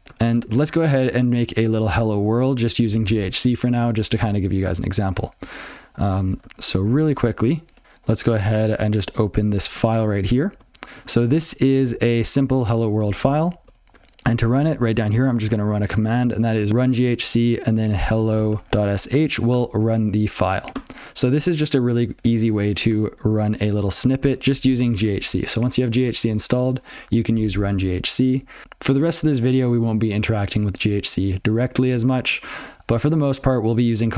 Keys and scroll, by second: 24.7 alt+x.